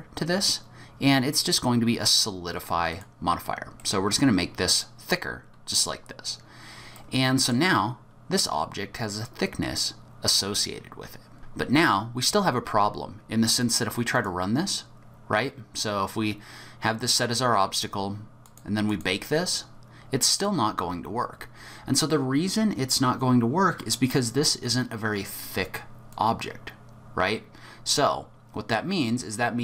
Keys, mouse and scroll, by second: 3.8 middle click, 6.9 middle click, 11.4 Tab, 11.4 middle click, 13.6 click, 14.1 click, 18.4 click, 18.9 click, 20.3 click, 26.1 click.